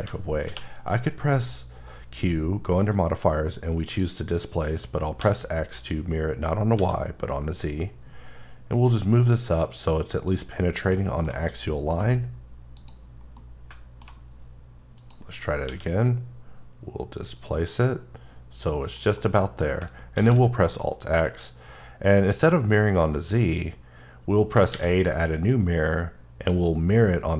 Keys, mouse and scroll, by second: 0.5 q, 5.2 x, 6.9 x, 10.6 middle click, 12.8 click, 13.2 scroll down 1, 13.4 middle click, 15.0 click, 15.3-15.7 scroll up 1, 15.7 q, 17.4 click, 19.2 middle click, 20.2 alt+x, 20.7 middle click, 24.7 a, 26.5 click, 27.0 middle click.